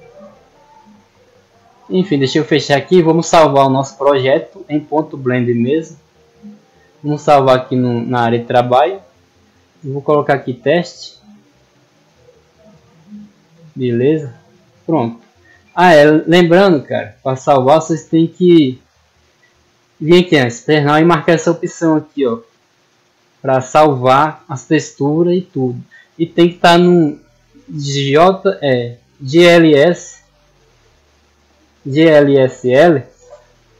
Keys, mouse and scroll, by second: 0.0 click, 1.5 click, 5.0 click, 6.0 click, 8.3 click, 9.3 click, 12.6 click, 13.9 click, 17.2 click.